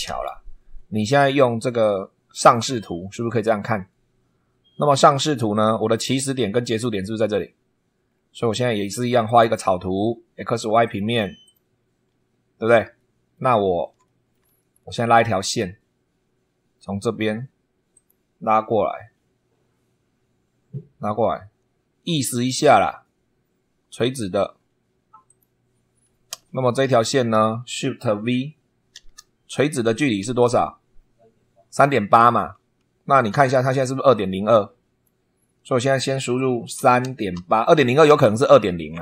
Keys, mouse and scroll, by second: 0.0 super+2, 2.3 click, 4.7 scroll up 2, 5.5 scroll up 2, 8.0 scroll down 2, 9.2 click, 10.8 click, 11.4 click, 12.0 scroll up 1, 12.9 shift+right click, 14.0 shift+right click, 15.4 click, 17.9 click, 25.2 click, 26.3 Escape, 26.9 click, 28.9 shift+v, 32.5 super+2, 34.1-35.2 drag, 36.5-37.8 typing, 38.0 Return.